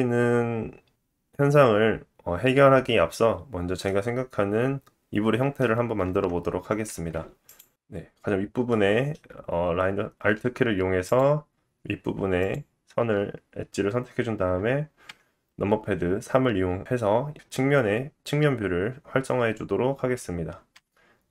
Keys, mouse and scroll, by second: 1.5 Tab, 2.9-7.3 alt+drag, 2.9 alt+middle click, 2.9 alt+right click, 4.6 KP_3, 6.7 shift+middle click, 8.6 middle click, 11.0 click, 11.0 middle click, 11.0 right click, 12.4 alt+click, 15.0 KP_3, 20.7 click, 20.7 g.